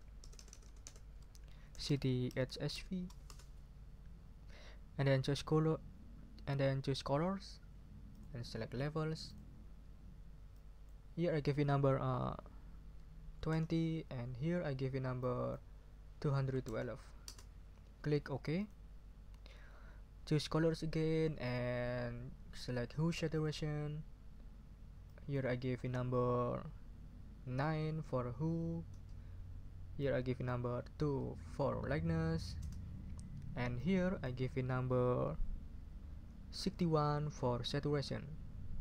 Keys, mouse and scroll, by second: 0.2 BackSpace, 1.6-3.2 typing, 8.1 click, 9.2 click, 10.5 click, 13.1-14.0 typing, 15.2 click, 16.1-17.1 typing, 17.2 Return, 18.6 click, 21.4 click, 23.3 click, 25.0 click, 27.6 9, 28.9 Return, 30.0 click, 31.0 2, 32.6 Return, 33.7 click, 36.3-37.2 typing.